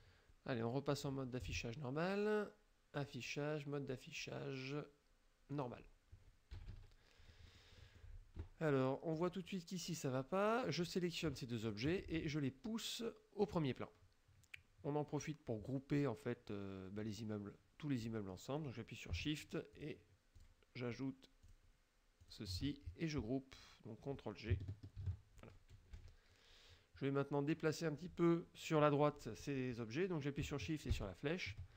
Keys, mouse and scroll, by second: 3.0 click, 5.6 click, 6.6 KP_Subtract, 7.6 middle click, 9.2 click, 10.9 click, 11.7 shift+click, 13.5 click, 19.8 shift+click, 20.4 shift+click, 21.5 shift+click, 22.3 shift+click, 25.1 ctrl+g, 26.0 KP_Subtract, 31.0 shift+Right.